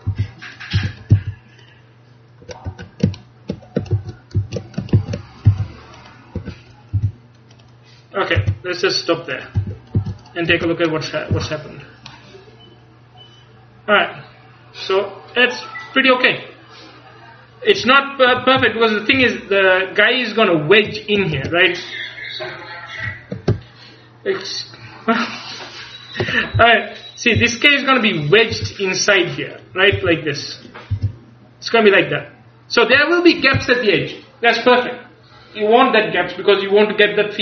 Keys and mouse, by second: 0.1 g, 0.9 a, 1.2 c, 4.0 ctrl+z, 4.4 ctrl+z, 5.6 ctrl+z, 5.6 c, 7.0 g, 8.5 r, 9.7 a, 10.0 z, 11.0 Tab, 11.4 a, 18.4 KP_2, 18.7 KP_1, 19.2 KP_3, 21.4 Tab, 23.6-27.4 ctrl+KP_Add, 27.4 s, 28.4-34.4 drag, 28.6 g, 30.0 s, 31.0 g.